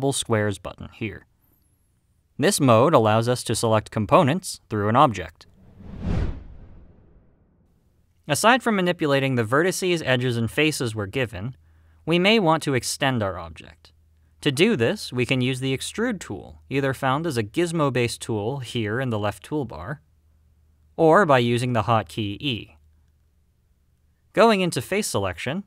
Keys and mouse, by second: 3.1-4.6 drag, 24.7 click.